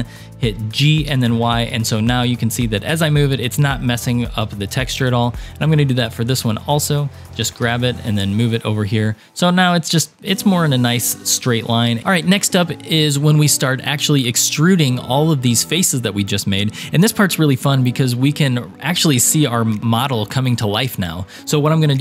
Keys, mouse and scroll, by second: 0.5 g, 4.9 scroll down 2, 5.8-7.2 drag, 7.3 g, 10.2-11.1 scroll down 3, 11.1 click, 11.5-12.0 scroll down 3.